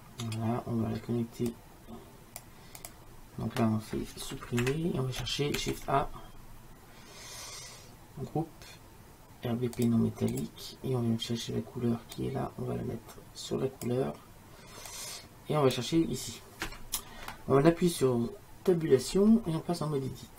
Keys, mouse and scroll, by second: 0.0-1.5 drag, 4.7 Delete, 5.7 shift+a, 12.3-17.4 drag, 19.2 Tab.